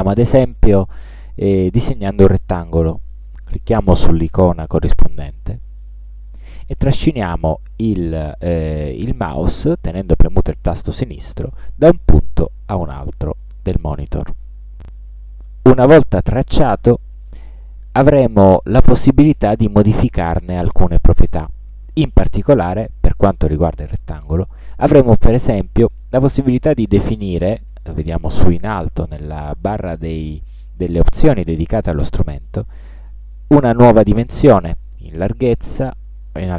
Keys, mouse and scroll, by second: 5.9 click, 11.9-13.8 drag, 25.9-26.5 scroll up 1, 35.0 1, 35.3 2, 36.0 Tab.